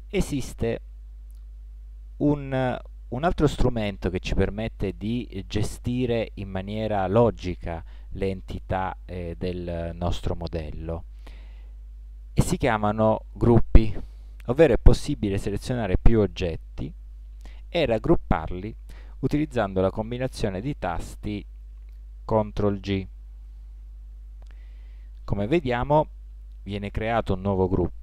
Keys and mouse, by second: 0.1-2.4 middle drag, 5.6-8.0 middle drag, 8.1-15.3 middle drag, 15.3-18.7 right drag, 21.3 t, 23.5 ctrl+g.